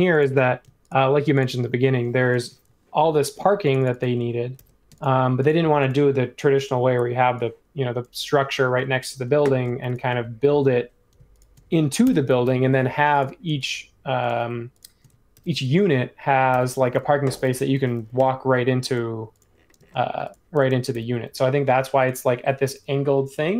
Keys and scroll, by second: 4.5 super+g, 12.0 BackSpace, 12.9 space, 15.3 super+g, 16.5 super+e, 18.1 i, 19.7 space, 20.9 super+e.